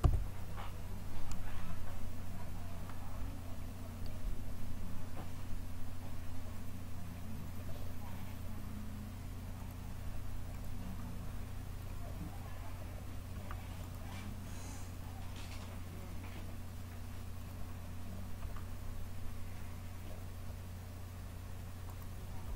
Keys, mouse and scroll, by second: 1.2-6.4 middle drag, 6.4-11.6 drag, 13.7-14.8 right drag, 14.8-17.8 drag, 17.8-21.8 middle drag, 21.8-22.5 right drag.